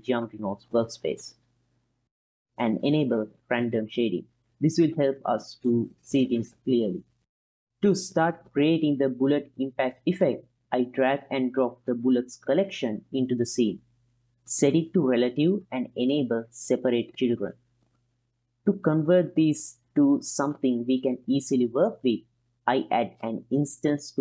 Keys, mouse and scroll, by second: 0.2-0.9 middle drag, 1.2-2.9 drag, 3.1-5.7 drag, 6.5-7.0 ctrl+middle drag, 10.8 click, 12.6-13.2 ctrl+middle drag, 13.5-13.9 middle drag, 14.8 click, 15.8 click, 17.6 click, 18.8-19.4 drag, 23.0 shift+a.